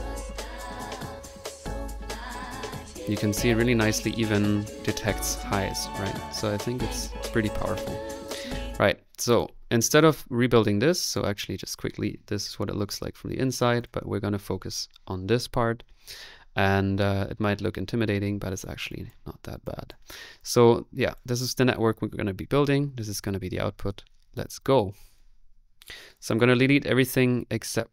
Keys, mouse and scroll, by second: 8.5 click, 9.3 click, 9.9 middle click, 11.1 click, 11.9 middle click, 12.3 middle click, 13.2 click, 13.8 click, 18.6 click, 19.3 click, 19.7 click, 20.1 click, 22.4-25.2 middle drag, 25.2 right click, 26.1-27.5 drag.